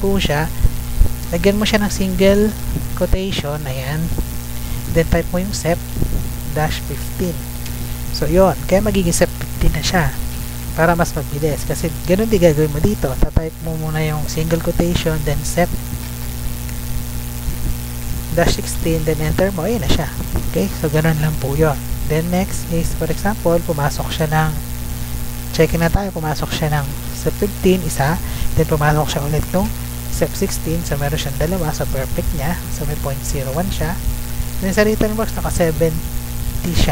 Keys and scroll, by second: 1.8 ', 3.0 BackSpace, 4.7-7.6 typing, 8.2 Up, 10.9 Right, 13.2 F2, 13.7 Left, 14.8 Right, 16.8 BackSpace, 18.6 Return, 19.1 Up, 19.6 Down, 19.9 Up, 20.1 Down, 22.1 Left, 26.2 1, 27.3 Right, 28.5 1, 29.3 Right, 30.7 Right, 31.5 Left, 32.0 Right, 32.6 Left, 33.3 Right, 36.5 7, 36.8 0.